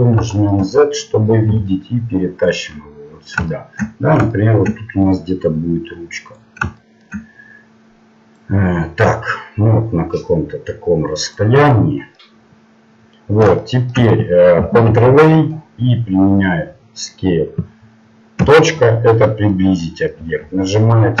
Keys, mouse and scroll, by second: 1.5 g, 5.1-6.8 drag, 6.8-8.4 middle drag, 8.4-10.4 drag, 11.7-14.9 middle drag, 17.2 ctrl+a, 18.4 KP_Decimal, 19.1-21.2 middle drag.